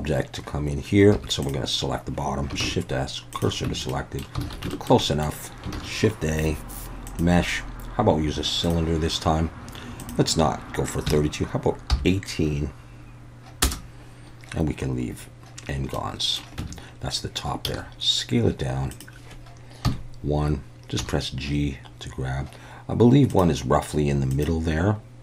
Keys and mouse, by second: 1.2 3, 1.5-2.5 drag, 2.6 shift+s, 3.7 Tab, 3.9 middle drag, 4.5 alt+a, 4.7 shift+middle drag, 5.0 middle click, 5.8 shift+a, 10.0-14.2 drag, 16.1-16.4 middle drag, 16.6 Tab, 17.7 s, 18.9 click, 19.9 KP_1, 21.0 g, 23.3 click.